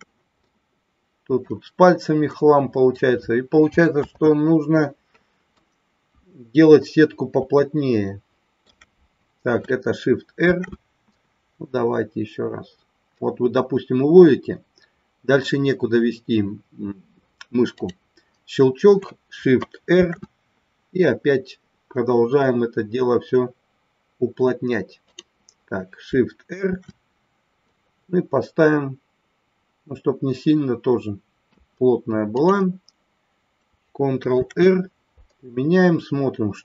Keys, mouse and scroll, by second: 0.3-1.5 middle drag, 2.2 middle click, 5.0 ctrl+z, 6.0 KP_1, 7.6-8.6 shift+middle drag, 10.4 shift+r, 19.8 shift+r, 26.6 shift+r.